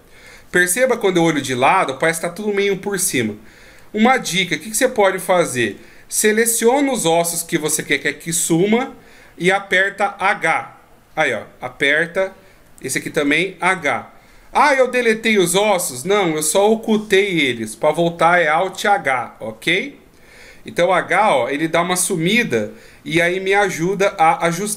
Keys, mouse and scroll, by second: 0.9 KP_3, 1.8 scroll down 2, 3.7 scroll up 3, 6.1 shift+right click, 7.2 shift+right click, 7.7 shift+right click, 10.2 h, 13.0 shift+right click, 13.8 h, 14.2-16.2 scroll down 3, 18.6 alt+h, 21.0 h, 21.4 scroll up 3, 23.9 right click.